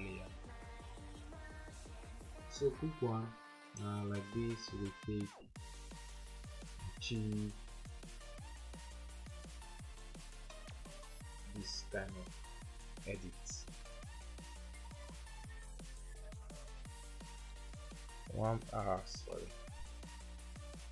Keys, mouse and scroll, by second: 7.9 alt+click, 9.0 alt+click, 13.8 typing, 15.0 typing, 16.3-17.5 typing, 19.5-20.0 typing.